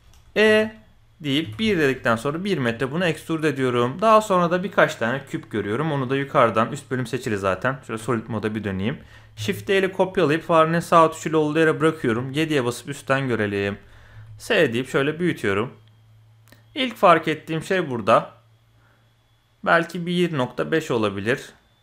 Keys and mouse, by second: 0.0 shift+middle click, 0.4 e, 3.0-3.6 drag, 5.1 middle click, 7.4 z, 8.2 click, 9.3 shift+d, 12.0 KP_7, 13.0 click, 13.7 shift+click, 14.1 s.